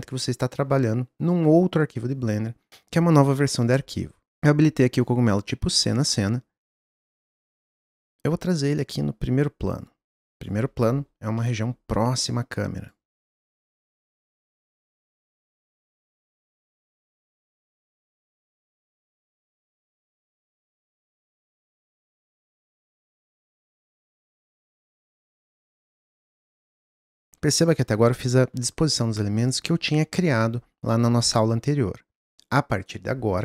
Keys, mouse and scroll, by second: 4.4 s, 5.0 click, 6.6 click, 7.9 click, 9.7 click, 11.0-11.4 scroll down 1, 11.4 middle click, 12.2 click, 13.8 click, 14.6 click, 15.0 scroll down 1, 15.1 middle click, 15.3 g, 15.7 s, 16.1 middle click, 16.2 scroll up 1, 16.4 middle click, 16.7 click, 17.4 click, 18.2 g, 19.6 click, 20.5 click, 20.9 g, 21.5 s, 22.0 click, 22.5 click, 23.5 g, 24.2 click, 24.5 s, 25.0 drag, 25.2 click, 27.3 click.